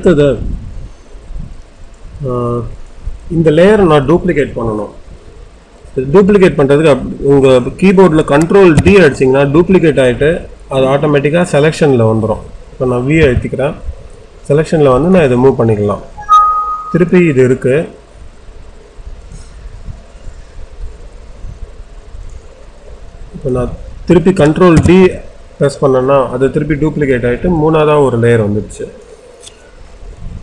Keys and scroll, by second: 13.1 v.